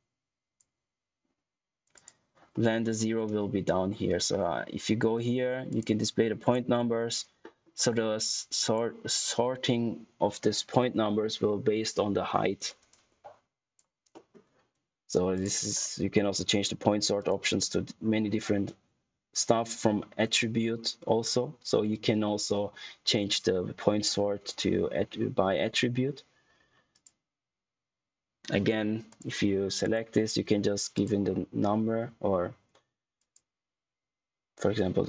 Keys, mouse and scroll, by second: 2.5 middle click, 2.7-4.6 scroll up 1, 5.6 click, 7.3 middle click, 7.7 click, 12.8 click, 14.0 middle click, 15.3 click, 26.8 click, 29.0 click, 33.1 click.